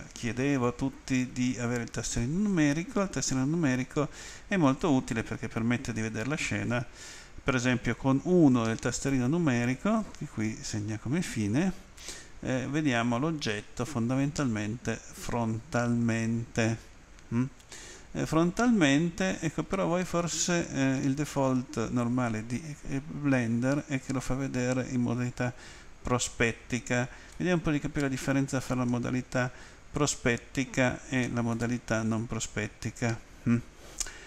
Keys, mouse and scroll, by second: 7.5 End, 27.3 middle click, 29.8 scroll up 1, 31.9-32.2 scroll up 1.